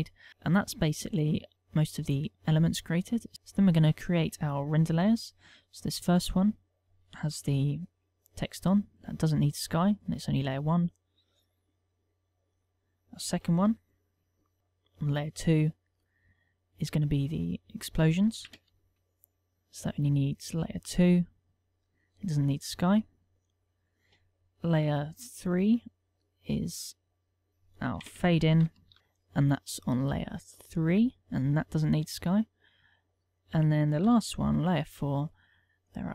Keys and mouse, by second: 3.3 ctrl+w, 7.7 1, 9.6 click, 10.6 click, 11.9 click, 12.7 click, 14.6 2, 17.8 click, 21.0 click, 21.6 click, 22.5 click, 25.0 3, 26.7 click, 27.5 click, 30.8 click, 31.9 click, 34.8 4, 36.0 click.